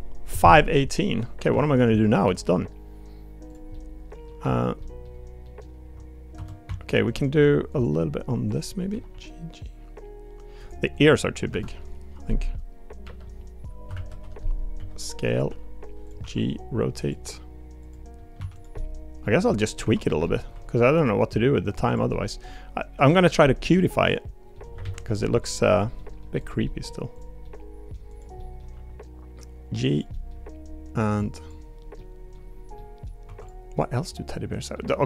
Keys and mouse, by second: 2.2 g, 3.7 click, 4.4 2, 4.8 click, 5.4 middle click, 5.7 Tab, 6.3 Tab, 6.6 1, 7.1 middle click, 7.7 click, 8.5 click, 8.9 g, 10.9 click, 11.5 l, 13.0 l, 14.7 s, 15.5 g, 16.2 r, 17.1 g, 18.4 1, 18.7 middle click, 19.8 2, 20.0 click, 20.2 middle click, 20.5 g, 22.1 middle click, 23.4 middle click, 24.0 middle click, 24.8 alt+z, 25.2 middle click, 25.7 click, 26.0 middle click, 26.4 click, 26.6 middle click, 27.4 middle click, 28.1 click, 28.4 middle click, 28.7 g, 30.1 middle click, 31.1 click, 31.4 click, 32.0 middle click, 32.7 middle click, 33.2 3, 33.4 click, 33.7 middle click, 34.9 middle click.